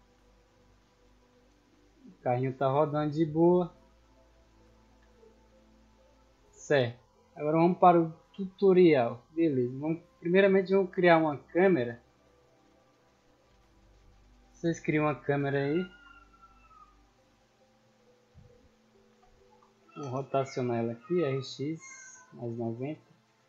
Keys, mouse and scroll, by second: 9.7-10.2 scroll down 2, 10.5-11.6 middle drag, 11.6-13.3 scroll up 2, 14.4-15.5 shift+middle drag, 15.5 click, 18.0 middle drag, 18.3-18.6 scroll down 2, 19.1 r, 19.4 x, 20.6 click, 21.5-22.5 drag, 22.7 scroll up 2, 23.1 shift+middle drag.